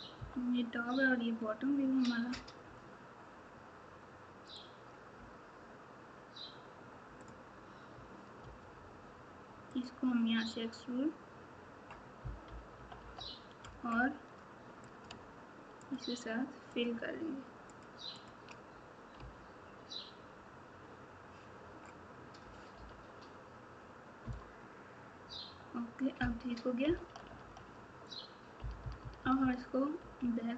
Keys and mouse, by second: 0.1 KP_9, 8.4 e, 12.4 KP_8, 14.9 click, 18.1 shift+click, 19.1 f, 22.7 KP_7, 24.2 KP_9, 26.8 KP_8, 27.2 KP_8, 28.5 KP_4.